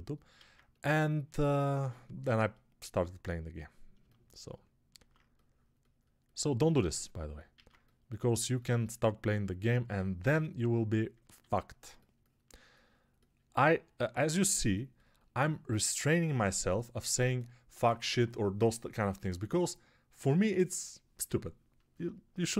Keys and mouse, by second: 0.3 alt+q, 11.3 alt+q.